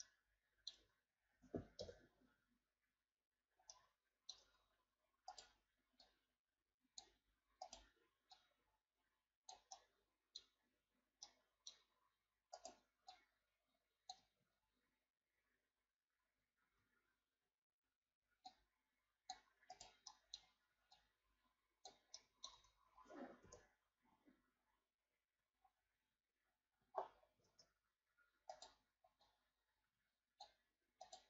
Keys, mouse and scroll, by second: 0.0 middle click, 0.8 Tab, 1.8 KP_1, 3.7 middle click, 4.5 Tab, 5.3 right click, 6.0-7.7 drag, 7.7 right click, 8.3-9.8 drag, 9.8-12.5 middle drag, 12.5 right click, 13.1-14.4 drag, 14.4 ctrl+z, 16.6 ctrl+z, 18.5-19.7 drag, 19.7 right click, 20.1 middle click, 21.0-22.2 drag, 22.2 middle click, 22.5 Tab, 23.4 KP_1, 24.6-25.2 scroll down 4, 25.5-26.4 shift+scroll up 7, 26.4-27.0 scroll up 6, 27.4 Tab, 28.5 right click, 29.2-31.0 drag, 31.0 right click.